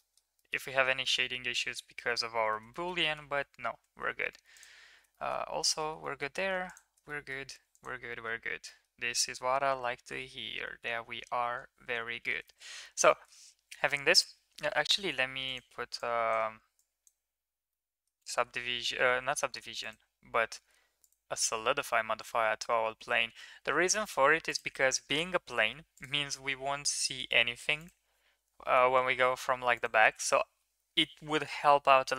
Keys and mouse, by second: 0.3 middle click, 1.1-2.6 middle drag, 2.7 shift+middle click, 3.0 middle click, 3.4 ctrl+z, 4.5 click, 5.1 shift+middle click, 5.6 middle click, 6.0 shift+middle drag, 6.3 middle drag, 6.6 click, 7.1 shift+middle drag, 8.1 middle drag, 8.6 middle click, 9.7 KP_3, 12.0 Tab, 12.4 shift+middle click, 13.1 shift+middle drag, 15.1 Tab, 16.0-16.3 drag, 16.7-17.1 drag, 17.6-18.1 middle drag, 21.1-24.6 drag, 25.9-27.1 drag, 27.7 click, 28.7 KP_3, 30.1 Tab.